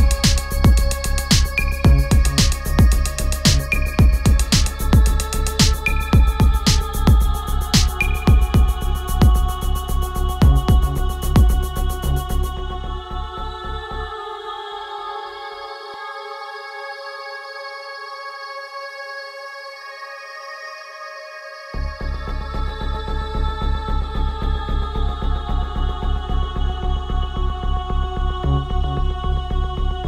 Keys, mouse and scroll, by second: 0.3 BackSpace, 2.4 BackSpace, 4.5 click, 7.7 click, 10.9 ctrl+a, 16.4 click, 22.5 ctrl+a, 25.9 BackSpace.